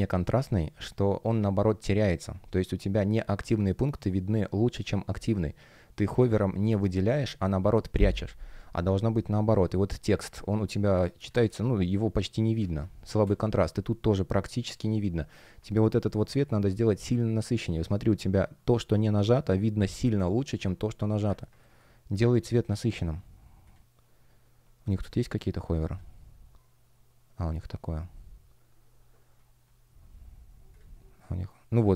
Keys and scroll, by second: 10.0 space, 12.5 space, 16.1 space, 21.5 space, 25.7 F1.